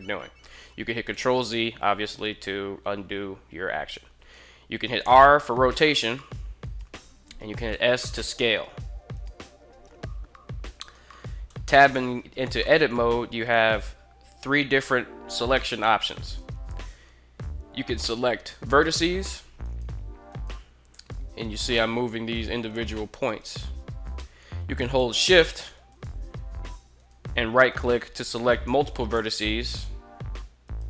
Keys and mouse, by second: 0.8 ctrl+z, 4.8 r, 6.4 right click, 7.5 s, 8.9 right click, 11.2 Tab, 12.3 middle click, 18.4 right click, 19.3 right click, 20.1 right click, 20.7 g, 22.5 right click, 22.9 right click, 23.3 g, 23.9 right click, 25.4 shift+right click, 26.6 shift+right click, 27.3 shift+right click, 28.8 g, 30.4 right click.